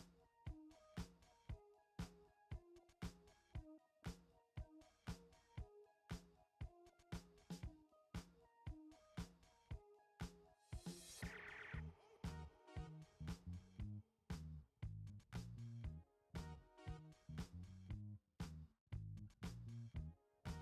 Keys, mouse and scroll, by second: 4.8 ctrl+z, 7.7-11.7 drag, 15.5 shift+c, 17.2-19.9 typing.